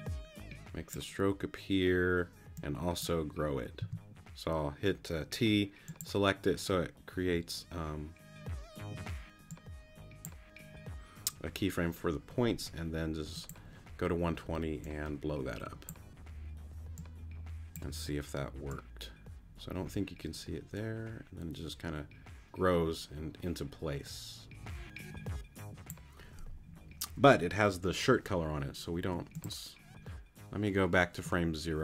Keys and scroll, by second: 3.8 t, 29.0 q.